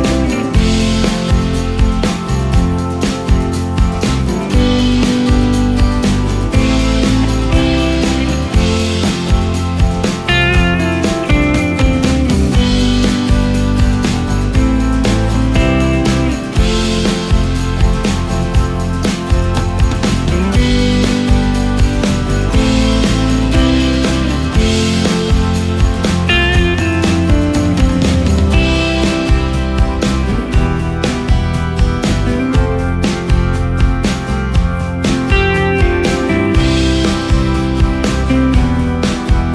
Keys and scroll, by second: 2.9 ctrl+space, 6.8 g, 7.2 space, 9.0 c, 13.8 ctrl+shift+space, 14.8 ctrl+shift+space, 15.4 ctrl+shift+space, 38.8 ctrl+space.